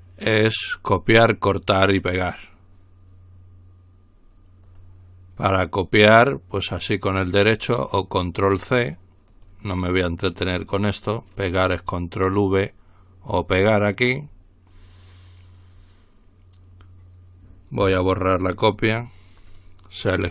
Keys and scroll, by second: 17.8 Delete.